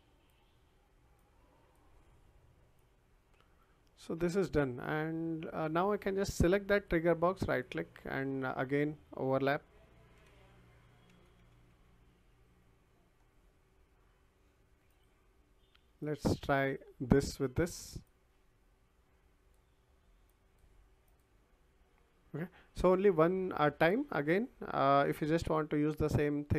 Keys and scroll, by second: 10.1-12.2 typing.